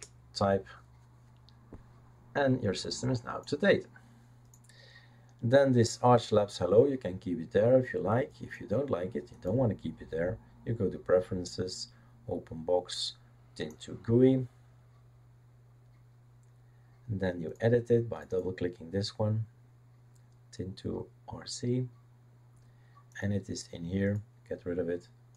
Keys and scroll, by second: 0.0-0.3 typing.